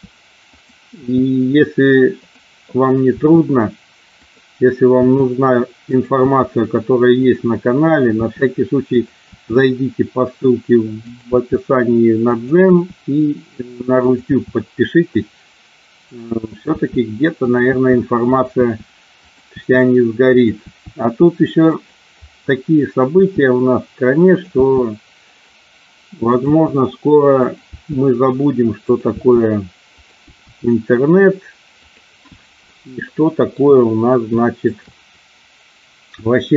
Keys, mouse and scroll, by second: 1.0 e, 2.1 click, 3.1 e, 4.2 click, 5.0 e, 5.8 click, 6.1 e, 7.1 click, 8.1 e, 9.0 click, 9.2 e, 11.3 e, 12.6 e, 14.0 click, 14.2 e, 16.5 click, 16.6 e, 17.3 click, 17.6 e, 18.2 click, 18.5 e, 19.1 click, 19.5 e, 20.2 click, 20.6 e, 21.7 click, 23.1 e, 24.2 click, 24.5 e, 26.4 click, 26.5 e, 27.5 click, 27.7 e, 28.8 click, 29.1 e, 30.2 e, 31.7 click, 33.0 shift+middle click, 34.7 shift+click.